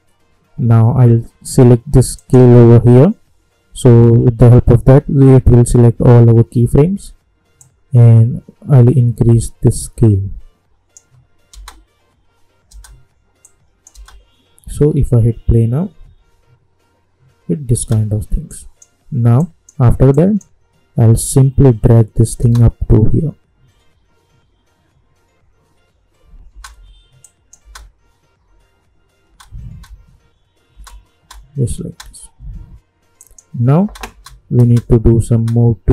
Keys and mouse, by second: 2.1 click, 7.5-11.5 drag, 11.5 space, 13.4 click, 13.9 space, 17.7 space, 18.5 click, 22.4 space, 26.4 space, 27.2 click, 27.6 space, 33.2 click, 33.8 space.